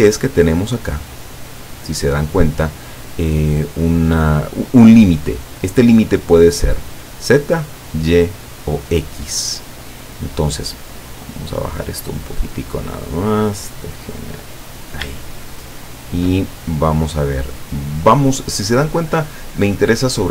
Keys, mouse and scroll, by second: 0.7-1.3 drag, 1.5 click, 5.6 click, 12.0-13.1 drag, 13.6-15.0 drag, 15.3-16.4 shift+middle drag, 16.5-16.9 shift+scroll down 2, 17.2-19.3 middle drag, 19.5 scroll down 2.